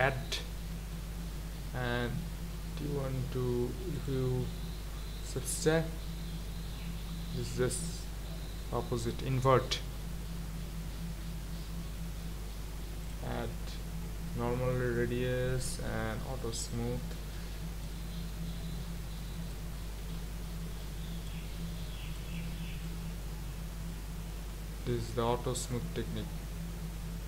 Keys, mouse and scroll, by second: 0.6 ctrl+z, 4.0 click, 5.6-8.7 drag, 10.2 ctrl+z, 13.0 click, 17.8-20.0 drag, 20.0 ctrl+z, 22.8-25.9 drag.